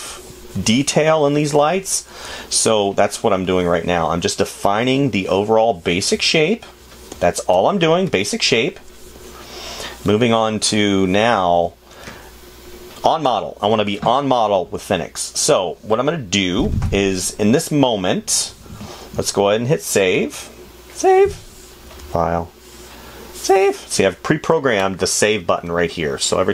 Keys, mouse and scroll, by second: 2.0 space, 6.6 space, 8.5 space, 11.7 space, 14.4 space.